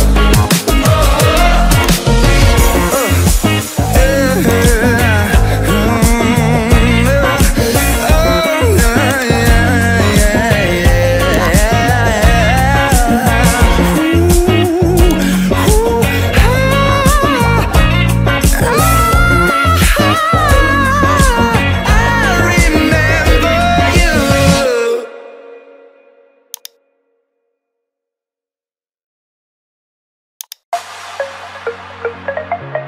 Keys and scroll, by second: 0.0 ctrl+alt+shift+e, 23.2 ctrl+alt+shift+e.